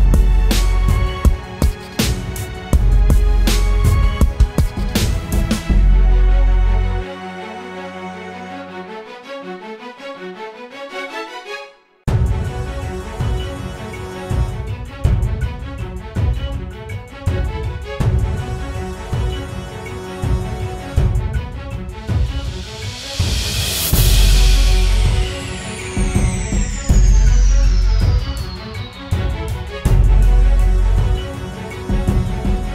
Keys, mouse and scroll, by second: 5.3-5.8 typing, 7.8-8.8 typing, 22.2-23.5 typing, 24.9 typing, 25.3 double click.